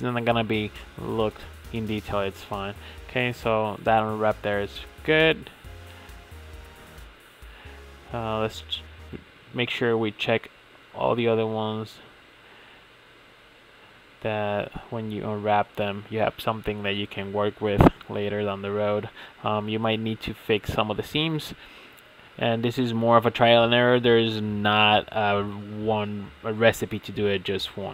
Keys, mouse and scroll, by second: 3.0-5.1 middle drag, 6.9-7.8 middle drag, 8.3-10.0 middle drag, 10.0-11.3 drag, 23.5-27.9 middle drag.